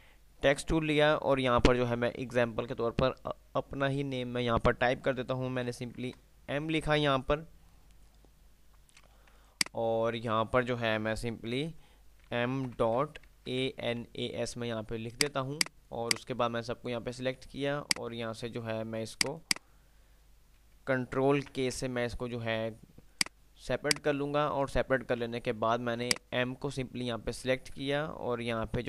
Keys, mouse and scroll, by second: 5.2 click, 5.9 m, 9.6 click, 11.9 F8, 13.3-14.4 typing, 15.4 click, 21.6 ctrl+k, 23.2 click, 24.9 ctrl+z, 26.2 click.